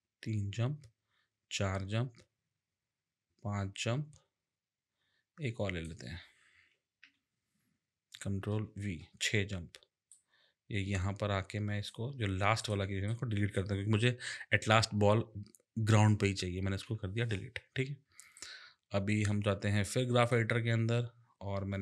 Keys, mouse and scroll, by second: 7.0 k, 8.5 ctrl+v, 10.1 click, 12.6 click, 13.1 double click, 16.8 Delete, 18.3 click, 20.2 click.